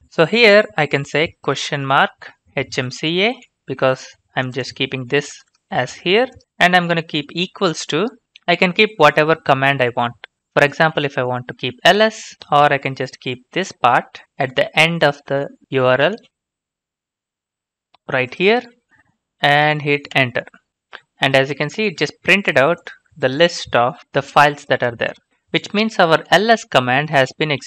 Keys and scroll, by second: 1.3-3.3 typing, 7.2 typing, 12.1-12.8 typing, 14.2 ctrl+c, 16.3 alt+Tab, 16.3 alt+Tab.